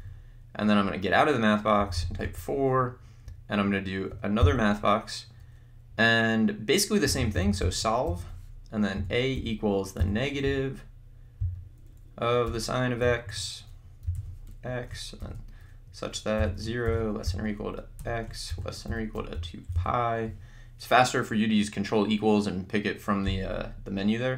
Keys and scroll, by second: 1.6-2.5 typing, 4.8 m, 6.8-10.0 typing, 12.5 Return, 13.1-14.7 typing, 13.3 Right, 16.4-20.3 typing.